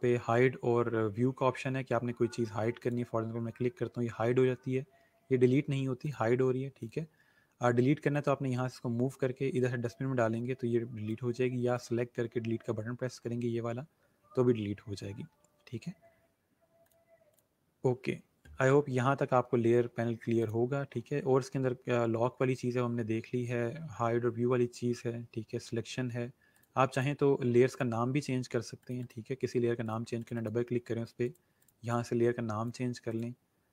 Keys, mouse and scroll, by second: 2.8 click, 6.0 click, 16.8 click, 20.4 click, 26.5 click.